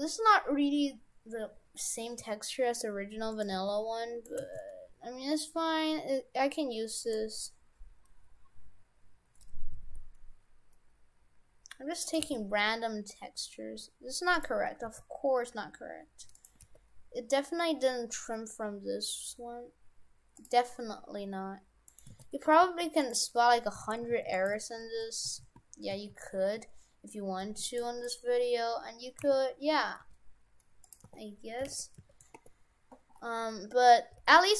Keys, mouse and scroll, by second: 2.2 s, 3.5 g, 4.4 g, 7.4-7.9 scroll up 3, 8.4-9.7 scroll up 1, 9.7 s, 12.2 g, 14.8 s, 16.6 g, 21.9 right click, 22.1 shift+f, 23.3 Tab, 23.9 shift+f, 24.6 shift+f, 27.9 Tab, 28.1 right click, 28.6-29.2 scroll down 5, 29.2 a, 29.6-30.9 scroll down 2, 30.0 g, 31.1 r, 33.2-34.1 scroll up 6, 34.1 g.